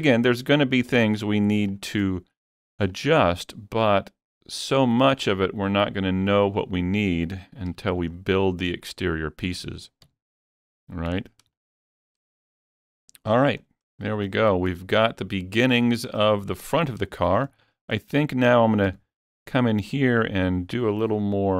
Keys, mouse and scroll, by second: 0.5 click, 1.7 shift+click, 2.9 shift+click, 3.4-7.9 middle drag, 5.3-8.1 drag, 7.9 alt+a, 7.9 Tab, 8.1-8.5 scroll down 3, 8.5-11.6 middle drag, 10.1 Tab, 11.1 Tab, 11.6-14.3 shift+middle drag, 13.7 scroll down 1, 14.3-16.8 shift+middle drag, 16.8 scroll up 3, 17.1 shift+middle click, 17.3 shift+middle click, 17.5-21.1 shift+middle drag, 18.9 Tab.